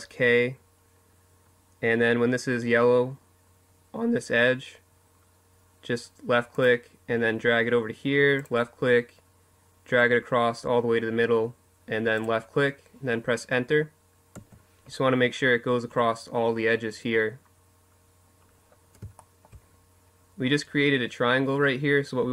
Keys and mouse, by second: 17.9 middle click, 19.8 middle click, 21.2-22.3 right drag.